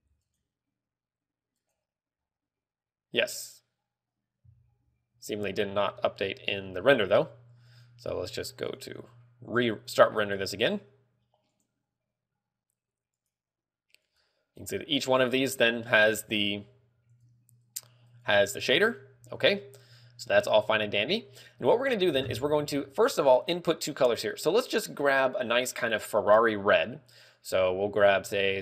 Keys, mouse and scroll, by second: 5.1 z, 5.2 scroll down 1, 5.4-5.8 scroll up 1, 5.8 z, 6.1 a, 8.1 click, 8.1 scroll down 1, 12.3 click, 13.5 click, 14.9 click, 15.3 click, 16.5 a, 17.4 click, 17.9 click, 18.4 click, 19.2 click, 20.7-21.2 scroll down 2, 26.1 click.